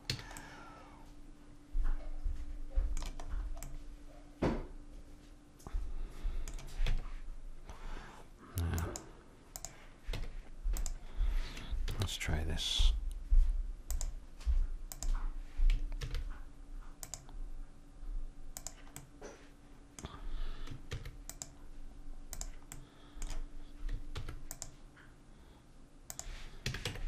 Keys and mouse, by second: 0.1 a, 3.3-6.4 middle drag, 6.9 Tab, 9.7-11.4 drag, 11.4 Tab, 11.8 ctrl+r, 16.0 ctrl+r, 19.0-20.8 drag, 20.9 ctrl+r, 22.7-26.4 drag, 24.1 ctrl+r, 26.7 a, 26.8 Tab.